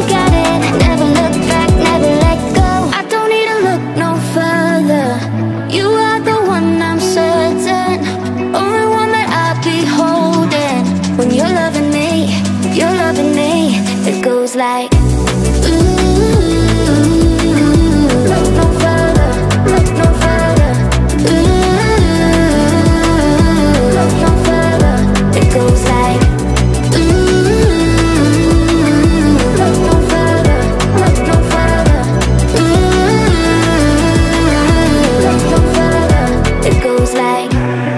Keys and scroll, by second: 3.6-4.7 typing, 15.8 space, 25.8 BackSpace.